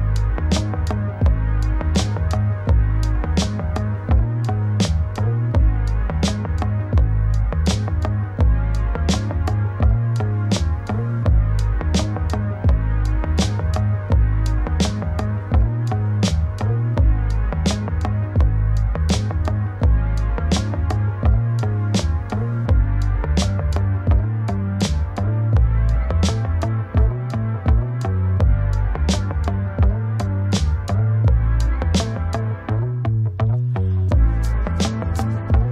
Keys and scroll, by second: 14.2 ctrl+space.